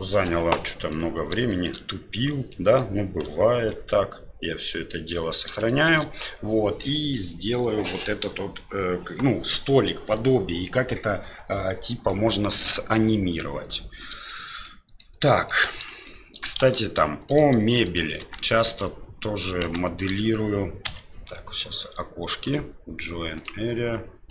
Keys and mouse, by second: 0.8 middle click, 1.6 shift+middle click, 2.5-2.8 middle drag, 3.7 ctrl+s, 4.9 middle click, 5.8 middle click, 14.1 middle drag, 14.6-15.1 middle drag, 15.3 shift+middle drag, 15.7 shift+z, 16.0 middle click, 16.6 shift+z, 17.3 right click, 17.8 right click, 18.2 Tab, 18.7 right click, 19.6 Tab, 20.8 KP_Divide, 22.5-24.3 right drag.